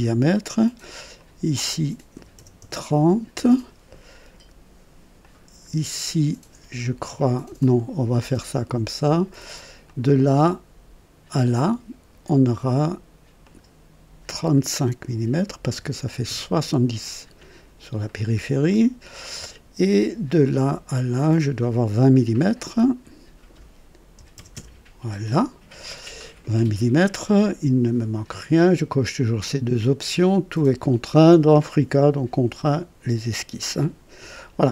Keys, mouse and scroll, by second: 0.9 click, 2.1 KP_3, 2.3 KP_0, 2.6 Return, 5.2 click, 7.6 click, 9.8 click, 13.4 click, 15.7 KP_3, 15.9 KP_5, 16.2 Return, 20.2 click, 21.4 click, 22.7 click, 24.1 KP_2, 24.3 KP_0, 24.5 Return, 24.7 Return.